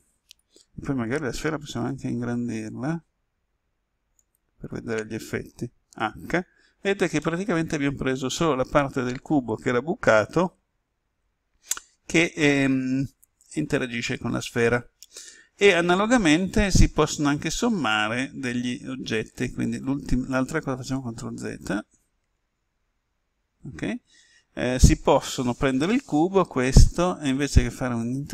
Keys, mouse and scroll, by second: 0.3 right click, 1.5 s, 4.2 click, 5.9 h, 7.1-17.8 middle drag, 20.7 ctrl+z, 21.6 ctrl+z, 22.2 ctrl+z, 25.6 right click, 28.0 click.